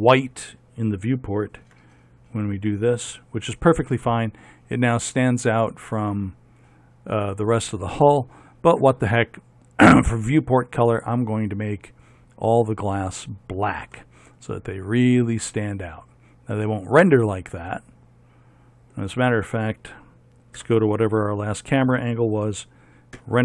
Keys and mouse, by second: 1.9 z, 2.8-4.1 drag, 10.3-14.2 drag, 14.2 middle click, 15.0-16.1 middle drag, 20.8 KP_0.